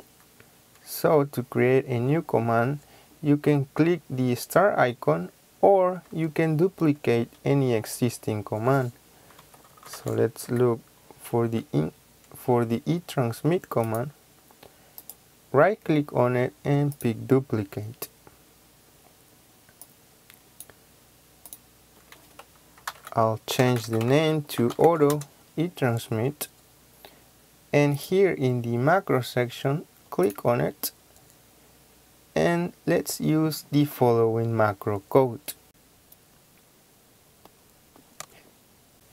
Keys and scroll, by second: 9.1-10.9 typing, 22.7 Caps_Lock, 22.8-25.2 typing, 38.1 BackSpace.